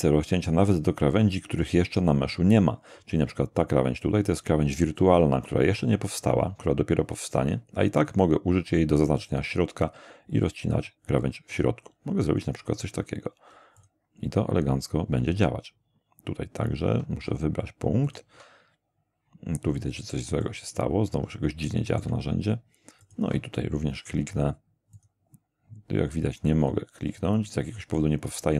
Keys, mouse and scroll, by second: 9.2 ctrl+click, 11.5 ctrl+click, 13.8 ctrl+click, 18.1 ctrl+click, 20.4-22.2 middle drag, 23.0 ctrl+click, 24.9 click, 27.1 click.